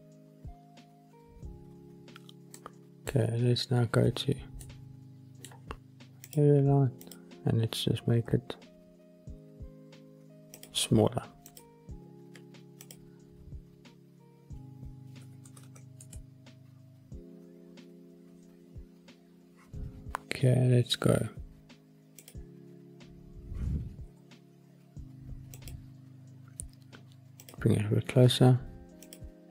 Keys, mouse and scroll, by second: 0.2 click, 2.5-3.0 middle drag, 3.7 scroll down 2, 4.5-5.4 middle drag, 6.2 click, 7.0 click, 8.2 b, 10.5 click, 11.4 click, 14.0 click, 15.0 click, 15.5 KP_0, 22.2 click, 22.5-23.0 scroll down 3, 24.0 g, 25.5 click, 27.3 click, 28.9 click, 29.4-29.5 scroll up 4.